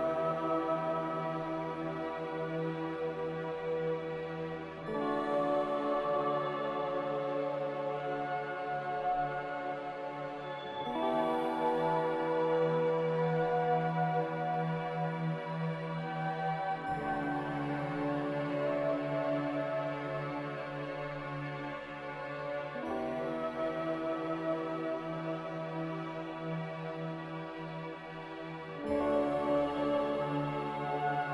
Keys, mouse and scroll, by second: 20.4 b, 30.2 x, 31.2-31.3 typing.